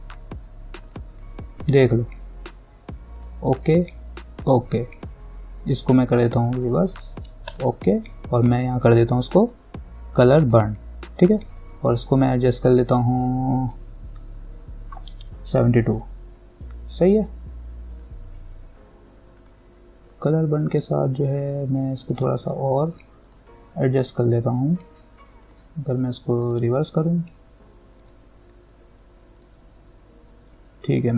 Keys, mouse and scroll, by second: 1.1 click, 6.8-16.1 drag, 16.1 7, 18.3-19.1 typing, 19.6 click, 25.7 click.